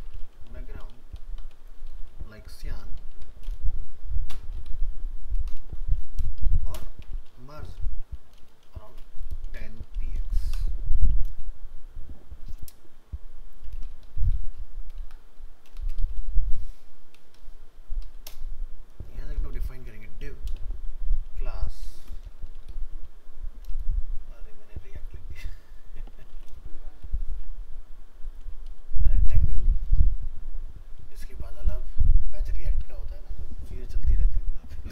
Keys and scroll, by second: 10.3 ctrl+s.